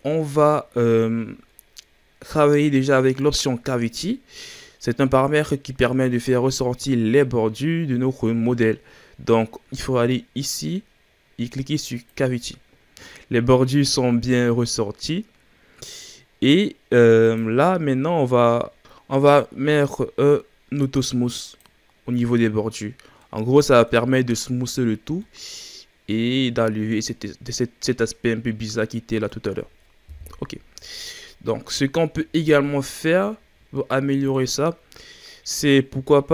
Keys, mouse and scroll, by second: 0.0-3.0 scroll up 1, 3.1-6.3 drag, 17.2-18.8 drag, 18.8-20.7 scroll down 4, 21.3 click, 23.1-30.0 middle drag, 30.0 KP_1, 31.0 scroll down 3, 31.2-31.9 middle drag, 31.9-32.6 scroll up 2, 32.6-33.2 shift+scroll up 4, 33.2-35.5 middle drag, 35.5 click.